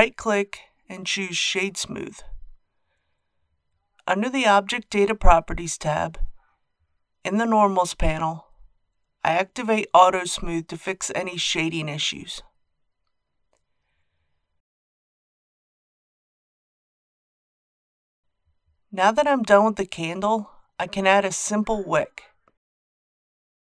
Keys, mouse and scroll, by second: 0.5-1.5 drag, 8.2-10.5 drag, 12.9-17.2 middle drag, 17.2-18.1 scroll down 1, 18.2-18.9 scroll down 1, 20.3 click, 21.6 KP_1, 23.0 scroll down 1.